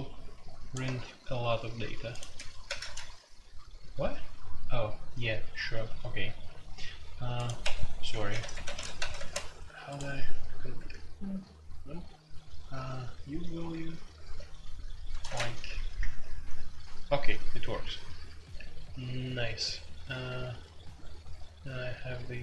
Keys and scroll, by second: 2.6 ctrl+c, 2.8 ctrl+c, 7.6 Escape, 8.1 typing, 8.5 Escape, 8.6 F2, 8.9 ctrl+c, 9.1 ctrl+c, 10.8 0, 14.2-15.6 typing, 16.0 Return.